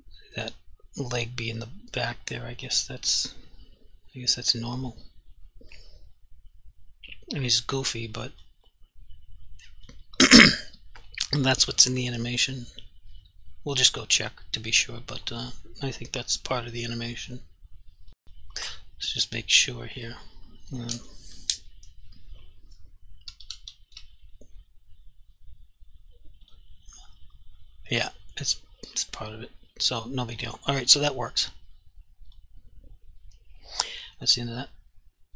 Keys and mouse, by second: 3.4 click, 8.3 click, 8.8 alt+click, 10.2 alt+click, 18.2 click, 23.5-23.9 typing, 26.5 click, 30.4 click.